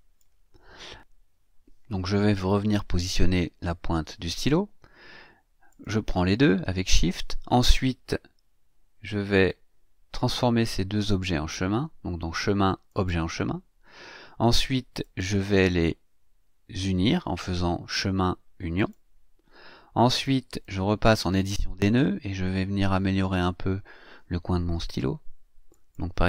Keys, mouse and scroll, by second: 3.2 Right, 5.7 shift+click, 9.3 click, 12.9 click, 15.0 click, 18.7 click, 20.2 click, 22.9-23.7 ctrl+scroll up 4, 25.7 click.